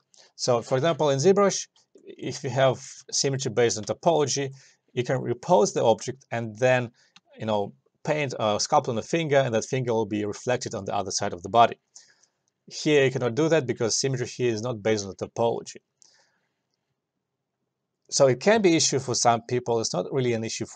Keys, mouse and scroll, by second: 1.9 alt+click, 2.1 alt+click, 3.3 ctrl+z, 4.1-7.0 alt+drag.